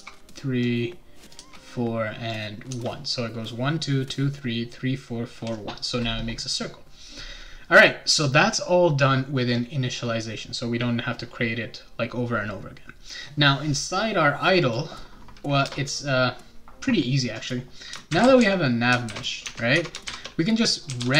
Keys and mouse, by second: 0.6 click, 1.4 4, 2.3 click, 2.7 1, 14.6 click, 15.6 shift+Return, 17.8-21.1 typing, 19.4 Tab.